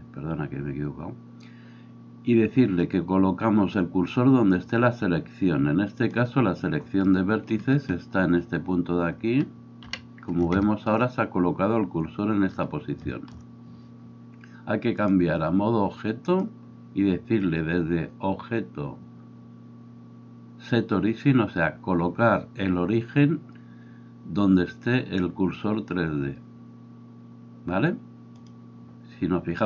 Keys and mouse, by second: 9.8 KP_1.